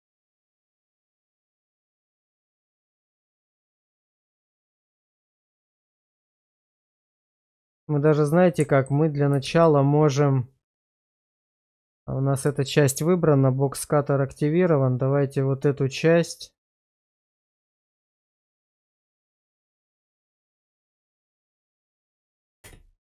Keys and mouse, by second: 0.1-0.8 middle drag, 1.0 shift+middle drag, 2.2-4.8 middle drag, 7.0-8.8 middle drag, 9.5 shift+z, 11.8 middle drag, 12.5 middle click, 15.0 drag, 22.8 space.